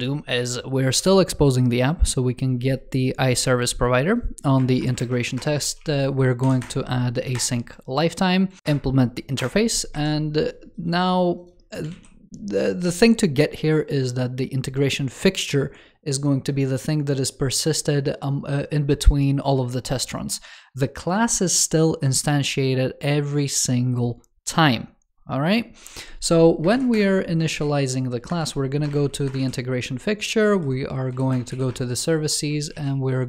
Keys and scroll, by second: 7.2 super+Return, 11.8 super+s.